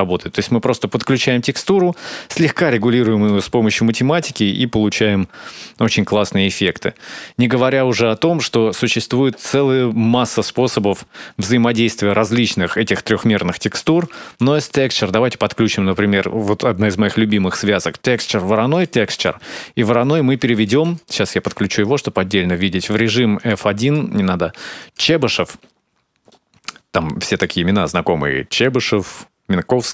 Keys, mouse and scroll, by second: 0.1 middle click, 3.2-3.9 scroll up 2, 4.1 middle click, 5.9-6.3 scroll up 2, 8.2 middle click, 10.6 scroll down 3, 13.8 click, 14.2 shift+a, 19.2-19.6 scroll up 4, 19.6 middle click, 20.4 ctrl+shift+click, 21.8-22.3 scroll up 2, 22.6 click, 23.6 click, 25.5 scroll down 3, 25.7 scroll up 2, 26.1 middle click, 27.1 click.